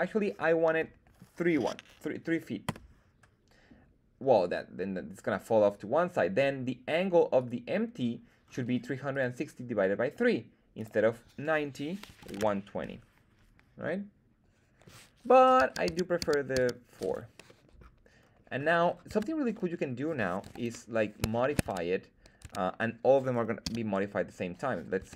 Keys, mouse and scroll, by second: 4.2-6.4 middle drag, 7.3 right click, 8.4-8.9 scroll up 2, 9.1 right click, 10.7-13.3 drag, 13.8-14.8 middle drag, 14.8-15.3 scroll up 1, 15.5 super+z, 15.8 super+z, 16.1 super+z, 16.5 super+z, 17.4-17.7 middle drag, 18.1 scroll up 1, 18.5-19.1 scroll down 2, 19.1 Tab, 19.5 middle click, 20.4 KP_1, 20.8-21.2 scroll up 2, 21.3 shift+middle click, 21.6 Tab, 22.4 Tab, 23.6 z, 24.9 Tab.